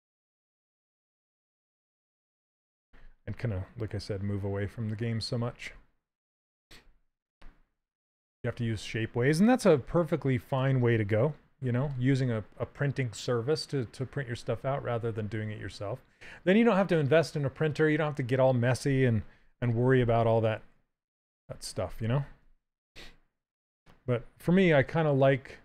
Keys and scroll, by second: 9.5 q, 19.0 w, 22.1 q, 24.1 x.